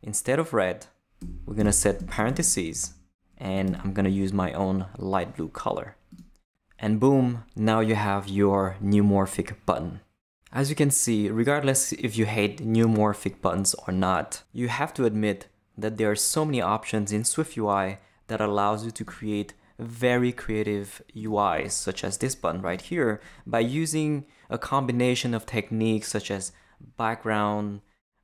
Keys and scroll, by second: 1.2 BackSpace, 2.0 shift+BackSpace, 2.2 shift+9, 2.7 shift+Left, 3.5 Left, 3.7 super+v.